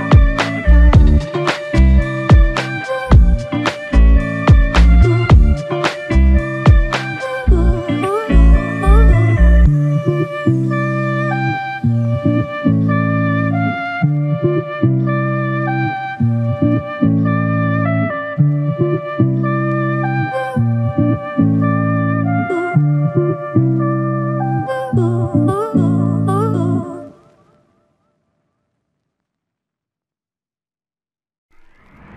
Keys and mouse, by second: 0.3 alt+click, 1.2 double click, 4.3 alt+click, 5.3 double click, 7.2 shift+click, 8.6 alt+click, 11.8 shift+click, 15.0 alt+shift+click, 16.2 double click, 17.7 alt+click, 21.9 double click, 24.3 double click, 26.1 alt+click, 27.5 alt+click, 28.7 double click, 30.9 shift+click.